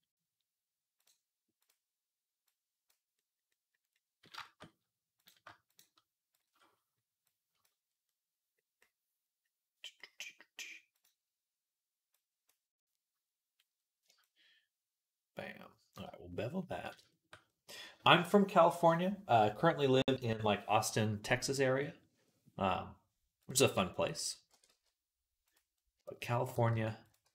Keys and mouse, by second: 1.5-3.3 right drag, 2.4 click, 3.4 click, 3.4 right click, 7.7-8.8 drag, 8.9-10.9 middle drag, 10.9-12.0 right drag, 12.0-22.4 middle drag, 23.3 click, 24.0 click, 24.4 e, 26.4 g.